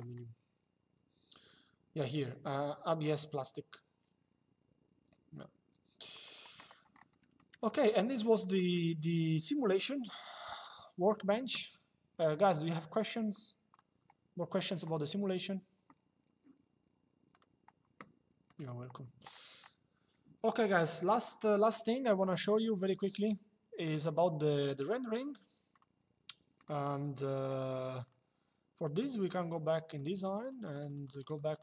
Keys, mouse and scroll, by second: 5.8 click, 6.8 middle click, 7.4 shift+middle click, 8.1 middle click, 12.0 click, 13.5 click, 17.1 click, 18.2 click, 20.5 click, 21.7 click, 23.5 click, 25.4 click.